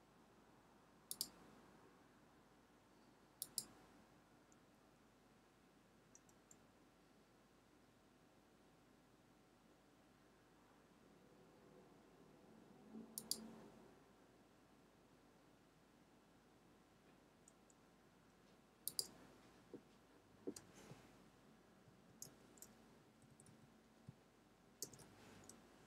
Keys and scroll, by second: 22.0 shift+", 23.0 Right, 24.8 shift+".